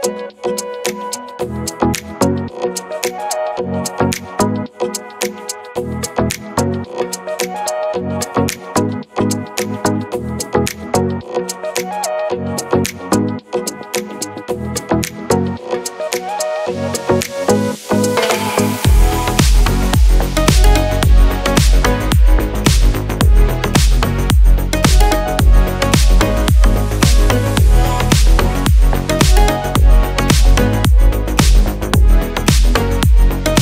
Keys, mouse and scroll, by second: 25.7 click.